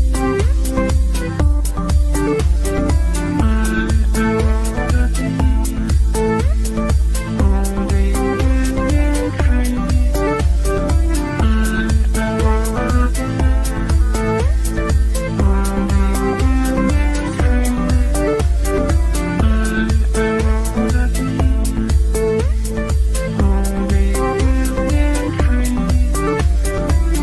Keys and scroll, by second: 0.1 c, 21.9 Delete, 26.0 Delete.